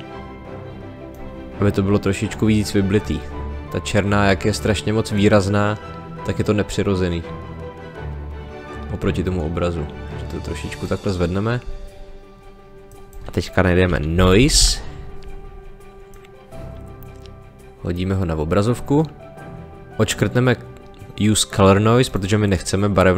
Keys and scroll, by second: 14.1 n, 14.3 i.